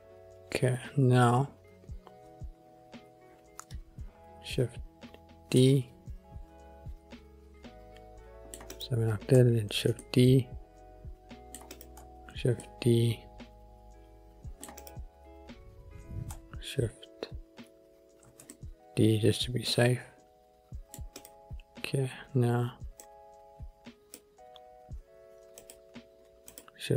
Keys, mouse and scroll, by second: 4.6 shift+d, 5.7 middle click, 8.8 click, 9.8 shift+d, 10.2 middle click, 11.8 click, 12.5 shift+d, 12.7 middle click, 14.9 click, 15.4-15.8 scroll up 2, 18.4 shift+d, 18.7 middle click, 21.3 click, 23.2 click, 24.3 click, 25.7 click, 26.7 click.